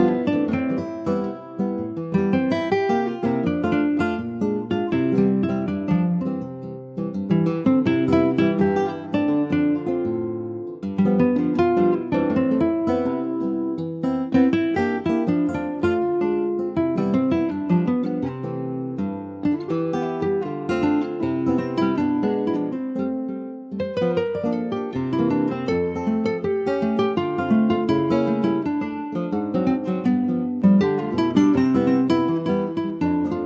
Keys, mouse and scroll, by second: 0.3 shift+middle click, 0.7-1.1 scroll up 1, 1.1 alt+z, 1.6 shift+middle click, 1.8 alt+z, 2.4-3.7 shift+middle drag, 3.7 click, 5.9 /, 6.5 middle click, 7.2 scroll up 1, 7.3 middle click, 8.3-9.1 scroll up 3, 8.4 middle click, 9.1 shift+middle click, 9.3-10.6 scroll up 3, 10.6 middle click, 11.5 click, 11.8 scroll down 2, 12.1-14.4 middle drag, 14.4 ctrl+s, 14.5 click, 15.0 shift+click, 15.5 middle click, 16.4 shift+click, 17.0 shift+click, 17.9 ctrl+j, 18.3 click, 18.5 scroll down 2, 18.8-23.7 middle drag, 24.0 ctrl+s, 24.1 click, 24.6 ctrl+s, 26.2 click, 26.7 ctrl+s, 26.7 click, 27.6 alt+middle click, 28.0 alt+middle click, 28.7 ctrl+s, 28.7 click, 29.1 shift+middle click, 29.7 ctrl+s, 29.9 click, 30.2-31.8 middle drag, 31.8 ctrl+s, 32.0-33.1 middle drag, 33.1 ctrl+s, 33.3 shift+middle click.